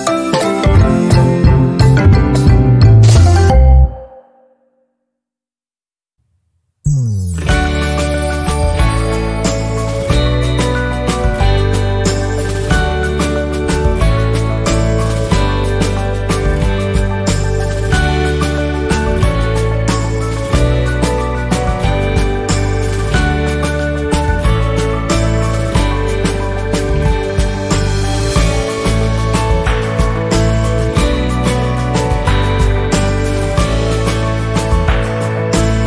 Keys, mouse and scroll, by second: 4.6 Delete, 5.4 click, 8.2 z, 8.6-10.4 drag, 11.1 F10, 12.7-17.1 drag, 17.1 click, 19.3 Right, 21.4-26.2 drag, 26.2-28.4 drag, 28.4 shift+scroll down 1, 29.0-30.7 drag, 31.4 Right, 33.9-35.6 drag.